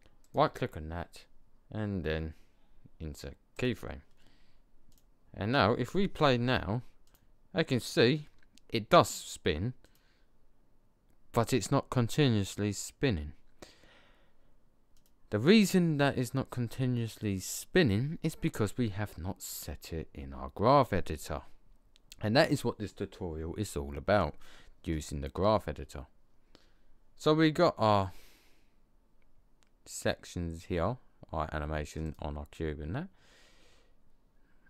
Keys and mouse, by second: 0.1-2.5 drag, 4.8-7.7 drag, 8.5 click, 9.8 click, 14.8 right click, 15.2-16.5 drag, 16.5 right click, 16.6 click, 32.0 right click.